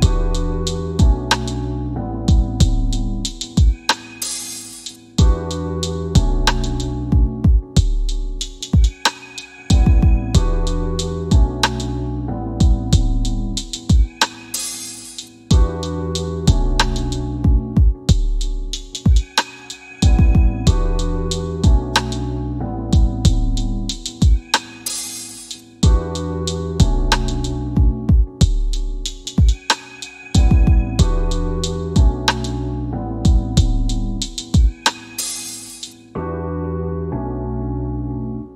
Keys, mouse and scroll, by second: 0.0 w, 1.3 click, 2.0 e, 3.0 click, 4.8 w, 5.4 w, 6.3 q, 7.8 scroll up 1, 12.4 scroll down 1, 19.8 scroll up 1, 20.7 middle click, 23.8 middle click, 25.3 scroll down 1, 25.8 scroll up 1, 26.4 middle click, 27.7 scroll down 1, 34.4 click, 35.0-36.0 typing, 35.9 scroll down 1, 36.9 middle click, 37.6 scroll down 1.